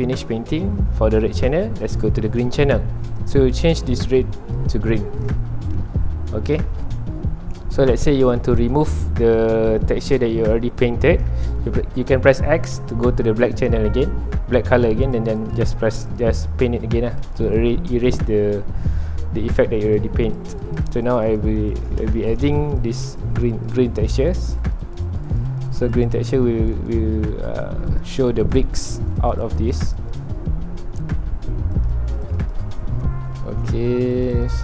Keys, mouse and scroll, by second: 1.8 scroll down 1, 4.2 click, 5.6-6.8 middle drag, 6.8-8.3 ctrl+alt+drag, 8.3 middle click, 9.1 scroll up 1, 9.5 scroll down 1, 9.7-12.2 middle drag, 12.2 scroll up 1, 12.5 x, 15.0-16.7 drag, 16.7-17.1 scroll down 2, 17.1 middle click, 17.2-18.2 drag, 18.2 middle click, 18.5 scroll up 2, 20.4-22.1 drag, 22.1 shift+middle click, 22.7-27.3 drag, 27.3 middle click, 28.0-30.5 drag, 30.5-31.7 middle drag, 31.7-32.7 drag, 32.7 scroll up 2, 32.9-34.2 middle drag, 34.2-34.6 drag.